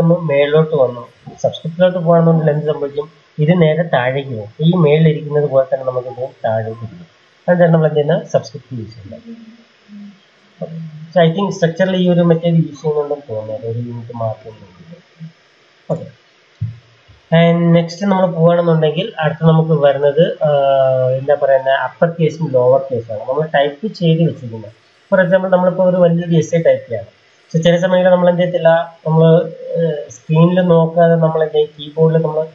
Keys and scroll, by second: 1.0 2, 12.9 shift+Left, 13.1 shift+Left, 13.2 shift+Left, 13.4 shift+Left, 14.0 shift+Left, 14.3 shift+Left, 14.5 shift+Left, 15.8 BackSpace, 17.4 ctrl+shift+Left.